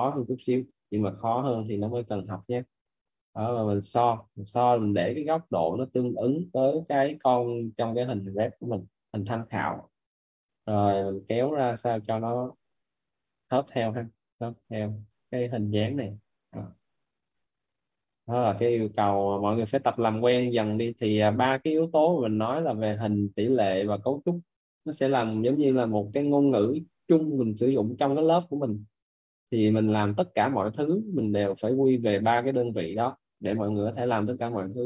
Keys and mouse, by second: 0.3-1.6 typing, 1.5 right click, 1.9 click, 4.0 right click, 5.7 alt+right click, 6.8 alt+right click, 8.4 right click, 9.4-10.6 typing, 10.5 click, 15.8 right click, 17.4 click, 18.0 right click, 18.6 click, 20.2 right click, 21.1 click, 26.8 right click, 29.0 click, 29.8 right click, 30.6 click, 31.5 right click, 32.2 click, 34.3 right click.